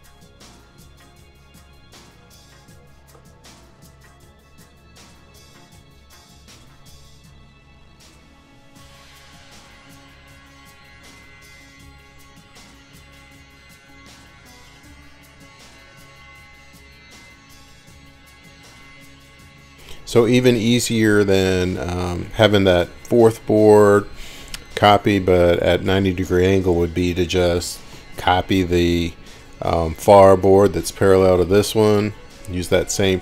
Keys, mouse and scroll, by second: 1.8 click, 6.6-7.1 scroll, 7.1 scroll down 6, 8.6 scroll up 1, 11.5 middle click, 13.9 scroll, 13.9 right click, 15.0 click, 16.5-17.5 scroll, 17.7 middle click, 18.8 click, 19.9 click, 21.9 scroll, 25.5 click, 28.5 ctrl+click, 32.6 click.